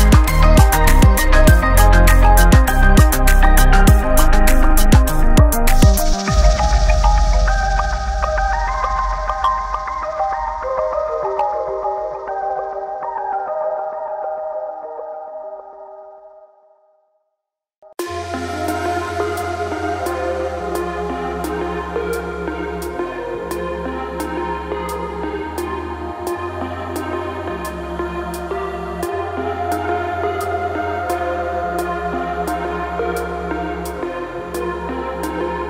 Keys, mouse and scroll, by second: 7.5-10.5 drag, 13.1 shift+d, 15.4-18.2 drag, 18.2 Tab, 22.7 Tab, 24.2-27.2 drag, 28.2 Tab, 28.8 Tab, 29.1-31.4 middle drag, 31.4 click, 32.8 shift+click, 35.2 ctrl+j.